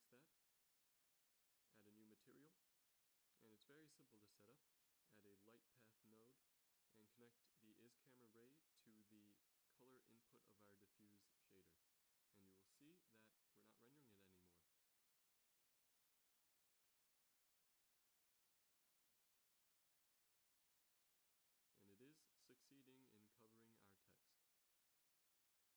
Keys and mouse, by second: 3.8 shift+a, 8.5-10.3 drag, 10.8-11.4 drag, 11.7 shift+z, 13.5 z, 13.8 z, 14.7 g, 17.2 shift+z, 17.8 g.